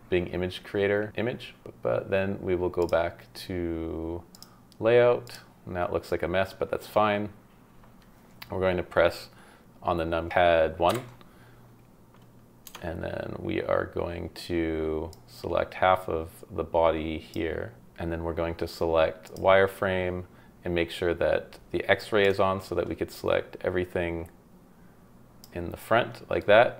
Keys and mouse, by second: 4.3 click, 10.9 KP_1, 12.6 Tab, 15.3-17.3 middle drag, 19.3 middle click, 22.2-25.4 middle drag, 26.4-26.7 middle drag.